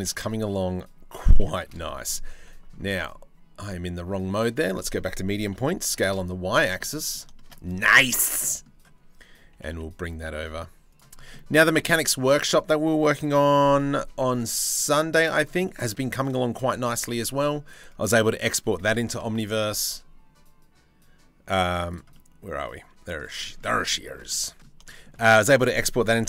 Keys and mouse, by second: 2.5 ctrl+z, 3.2-4.2 drag, 5.0 s, 6.4 click, 6.9 click, 7.5 1, 7.8 click, 8.0 click, 9.1 g, 10.9 click, 11.2 click, 13.1 g, 15.2 shift+middle click, 15.9 shift+middle click, 16.2 click, 16.6 2, 16.7 click, 18.4 e, 21.7-22.7 middle drag, 23.0 shift+middle click, 23.2 middle click, 23.8 middle click, 24.4 shift+middle click, 25.8 g.